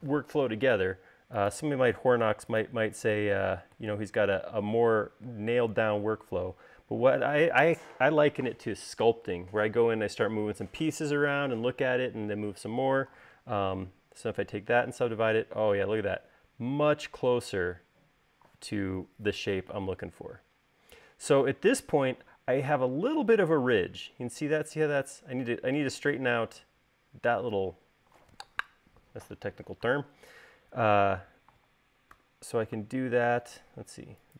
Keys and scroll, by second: 14.7 u, 22.0 space, 32.9 u.